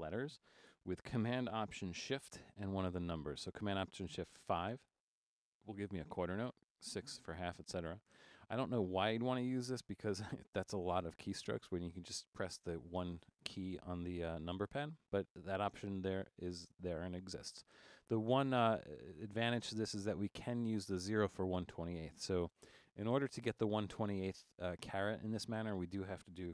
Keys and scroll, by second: 4.9 alt+shift+super+5, 7.0 alt+shift+super+6, 8.1 alt+shift+super+5.